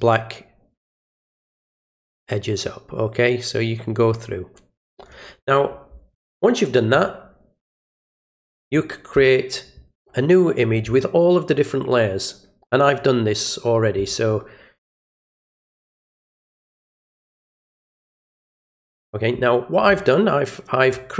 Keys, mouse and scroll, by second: 7.9 alt+click, 11.9 click, 14.9 click, 17.2 click, 20.8-21.1 middle drag.